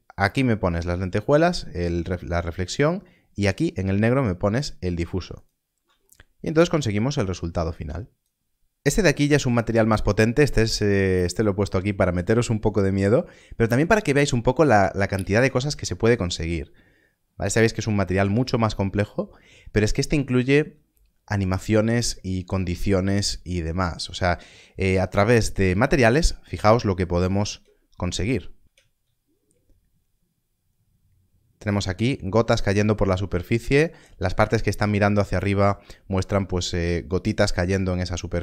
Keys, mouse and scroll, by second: 5.4 ctrl+shift+click, 7.7 click, 8.5-10.0 scroll up 1, 27.3 scroll up 1, 27.4 space, 28.6 ctrl+space.